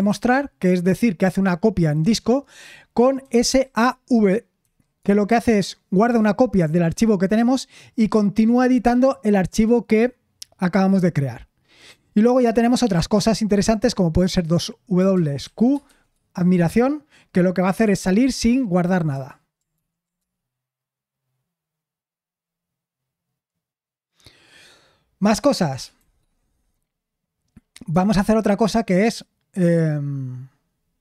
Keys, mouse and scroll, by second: 15.3-16.1 typing, 19.7 ctrl+p, 20.2 Return.